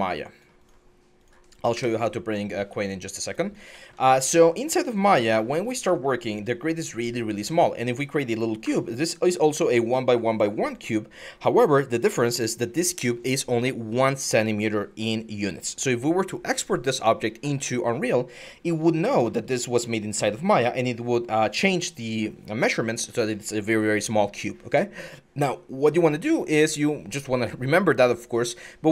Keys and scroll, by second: 1.5 Delete.